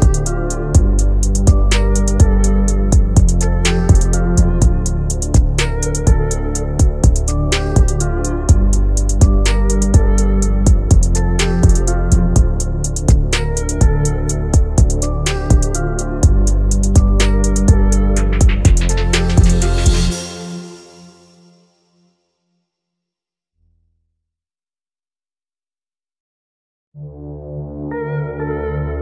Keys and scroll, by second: 24.3 ctrl+z.